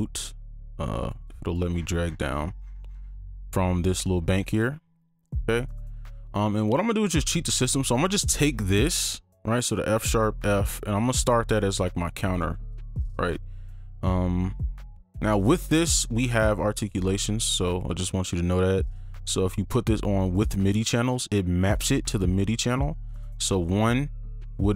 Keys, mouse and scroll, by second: 1.2 double click, 1.7-2.7 scroll down 1, 7.1 right click, 8.1 ctrl+click, 9.5 right click, 12.3 right click.